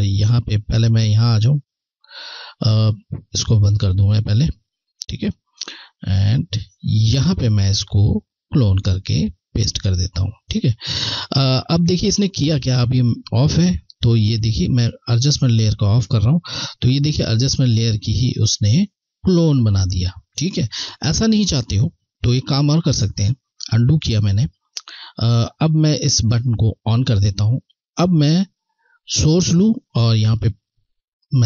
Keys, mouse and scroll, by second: 1.5 ctrl+click, 7.6 ctrl+click, 15.5 ctrl+Left, 22.2 ctrl+Left, 26.8 click, 29.3 alt+click.